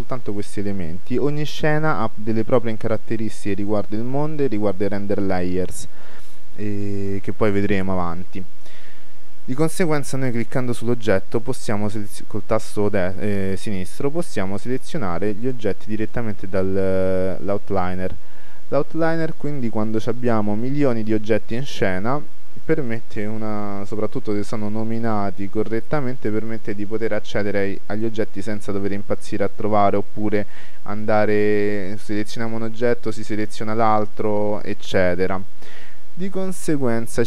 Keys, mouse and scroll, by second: 10.6-28.1 drag, 29.3-31.1 middle drag, 34.9-37.2 right drag, 35.4-37.2 middle drag.